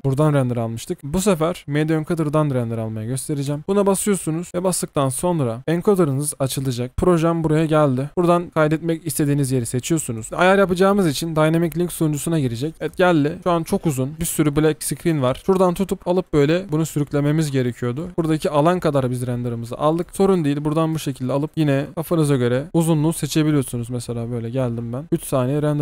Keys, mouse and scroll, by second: 15.2 alt+scroll down 1, 18.1-18.8 alt+scroll up 1.